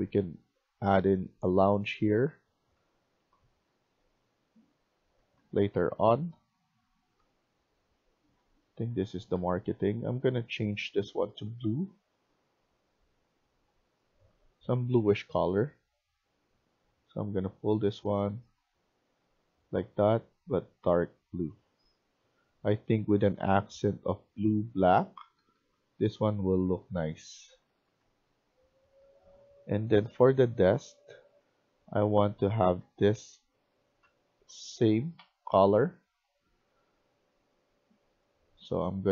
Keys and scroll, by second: 0.0-1.0 typing, 2.3-10.8 typing, 24.7-27.5 typing, 28.7-29.5 typing, 30.8-36.6 typing, 38.6 typing.